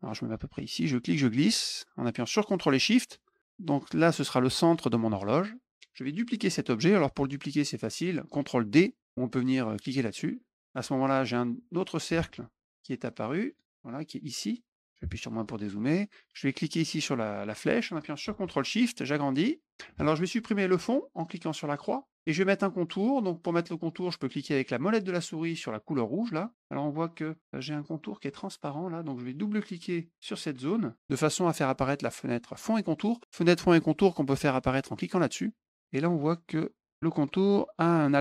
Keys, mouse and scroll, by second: 0.5-3.6 drag, 11.3 click, 13.4 click, 16.7-19.7 drag, 21.7 click, 26.2 middle click, 30.1 click, 30.2 click, 34.9 click.